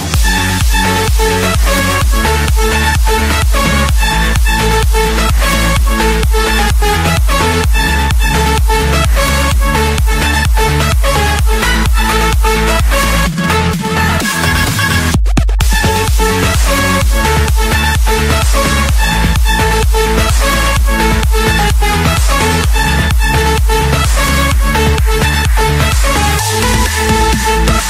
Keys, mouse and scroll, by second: 2.2 d, 2.8 Return, 3.7-5.2 typing, 6.7 Return, 9.2 Escape, 10.6-11.6 middle drag, 11.6 scroll up 1, 12.3-13.8 typing, 14.2 Return, 16.5 typing, 17.4 Return, 20.7-21.8 drag, 22.5-23.7 drag, 24.7-25.9 drag, 26.6 Escape, 26.6-26.9 scroll.